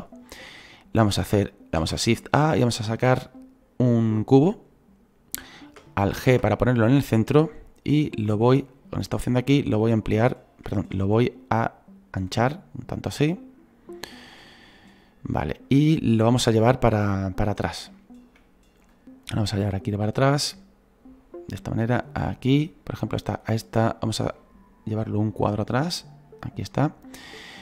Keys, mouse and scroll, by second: 15.7 click, 16.6-17.0 scroll down 3, 17.0-27.6 middle drag.